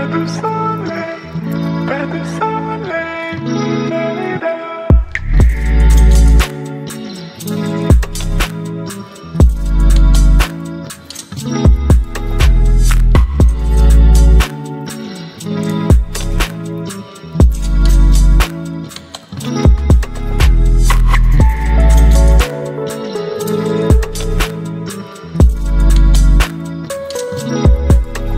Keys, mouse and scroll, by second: 12.9-16.2 drag, 20.9 click, 22.0 ctrl+t, 24.5-28.3 alt+drag.